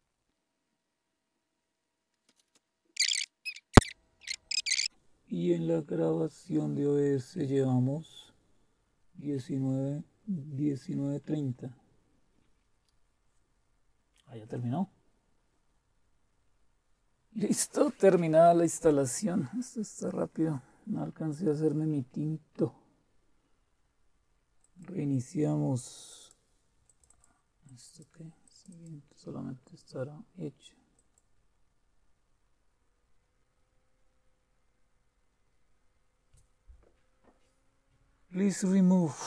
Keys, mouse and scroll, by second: 24.6 click, 26.1 click, 27.6 click, 28.4 click, 30.9 click.